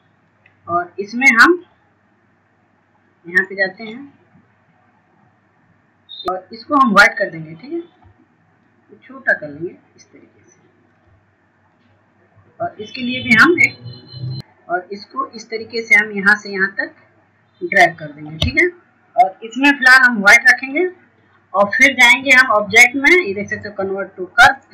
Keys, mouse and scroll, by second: 0.4 click, 3.3 click, 11.7 shift+click, 17.7-19.4 scroll up 1, 19.4-21.7 drag.